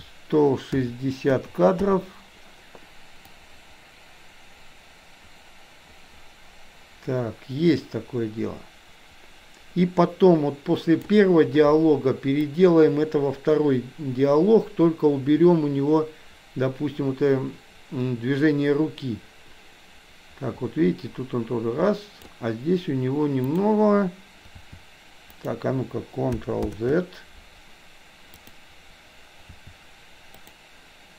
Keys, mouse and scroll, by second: 3.4-11.0 drag, 12.4-22.3 drag, 23.5 click, 24.6 r, 26.6 ctrl+z, 28.4 click, 29.5 r.